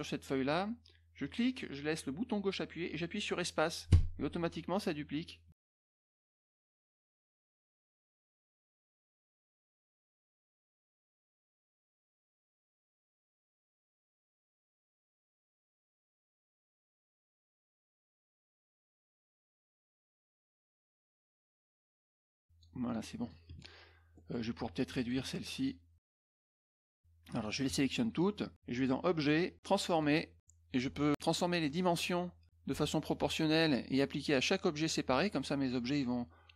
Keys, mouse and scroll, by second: 1.2-8.6 drag, 9.2 click, 10.1 ctrl+shift+click, 10.9-12.6 drag, 13.6 click, 14.3 click, 15.3 click, 15.6 click, 17.0 ctrl+click, 18.1 click, 18.5 click, 18.8-19.8 drag, 20.5-21.5 drag, 21.9 click, 22.0 click, 22.8 click, 24.1 middle click, 25.0 click, 25.5 shift+click, 26.2 shift+click, 26.7 shift+click, 27.3 shift+click, 28.7 click, 29.9 click, 31.8 click, 34.7 click.